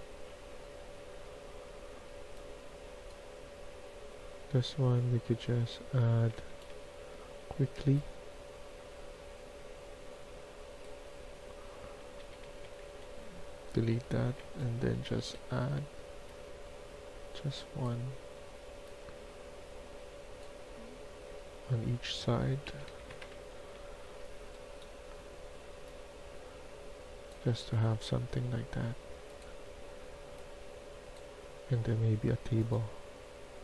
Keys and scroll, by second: 5.1-7.2 typing, 11.9-13.3 typing, 13.9 Delete, 14.7-15.4 typing, 22.3-23.8 typing, 27.1-27.9 typing.